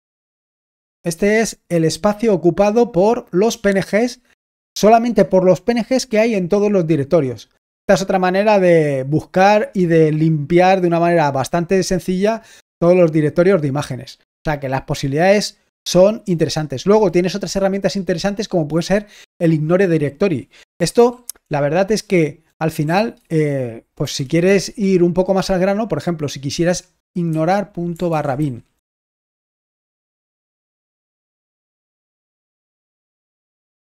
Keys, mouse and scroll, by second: 20.1-21.3 drag.